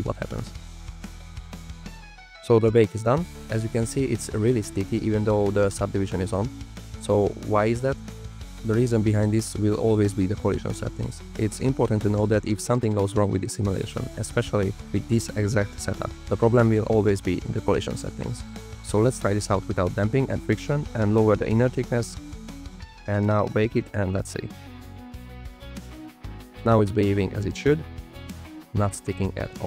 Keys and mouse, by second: 1.9 click, 2.6 shift+click, 2.8 shift+click, 3.5-3.9 drag, 5.2 space, 5.9 click, 9.3 click, 10.3 click, 13.2 click, 26.5 click, 27.6 space, 28.0 click, 29.2 space, 29.5 drag.